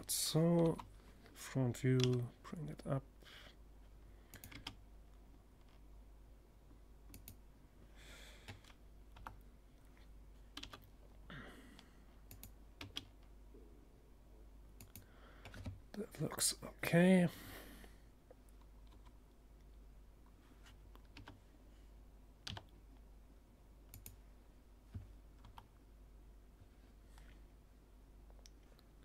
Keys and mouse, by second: 0.4 g, 2.9-4.7 drag, 3.0 r, 5.7-7.4 drag, 7.6 KP_7, 9.0 g, 10.8 click, 11.2 r, 13.4-15.2 drag, 17.3 KP_1, 19.6 r, 22.5-24.1 drag, 23.8 KP_7, 24.1 middle click.